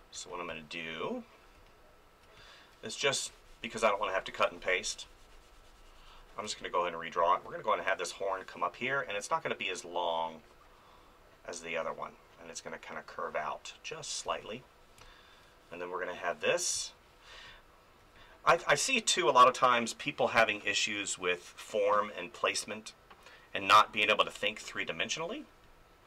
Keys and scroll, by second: 0.0-0.5 typing, 6.4 space, 14.2 space, 16.7 space, 24.2 space.